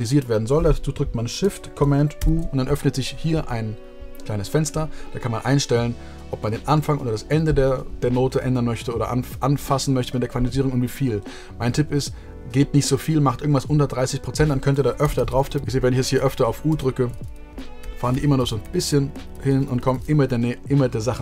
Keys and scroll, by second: 16.6 super+a, 17.4 super+u, 17.7 super+u, 18.0 super+u, 18.3 super+u, 18.5 super+u, 18.8 super+u, 19.1 super+u, 19.3 super+u, 19.4 super+u, 19.6 super+u, 19.7 super+u.